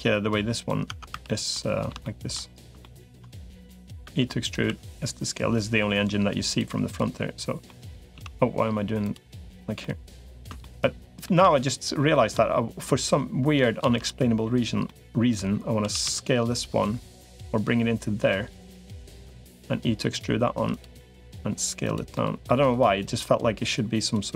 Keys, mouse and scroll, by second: 0.7 Tab, 1.1 click, 1.1 3, 1.3 middle click, 1.8 shift+middle click, 2.6 shift+middle click, 3.9 e, 4.5 s, 6.7 click, 7.5 middle click, 7.9 z, 9.6 middle click, 10.5 middle click, 11.3 middle click, 13.7 shift+d, 14.7 middle click, 15.7 s, 17.3-18.9 drag, 19.1 e, 20.3 3, 20.5 click, 20.9 s, 21.9 middle click, 22.9-23.9 drag, 24.1 middle click.